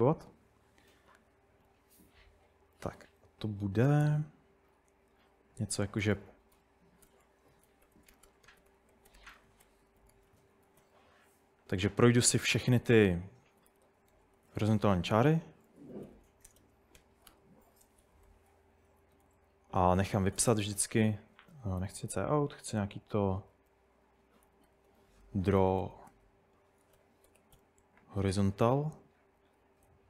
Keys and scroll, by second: 5.8-28.3 typing, 17.3 Escape, 18.3 Tab, 18.4 Tab, 21.1 Escape, 22.2 Escape, 23.4 Tab, 29.6 Escape, 29.9-30.0 typing.